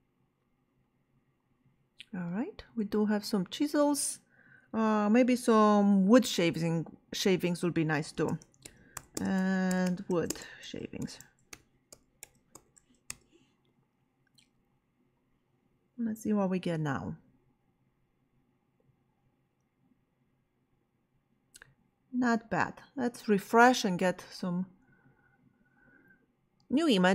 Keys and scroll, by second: 8.1-13.2 typing.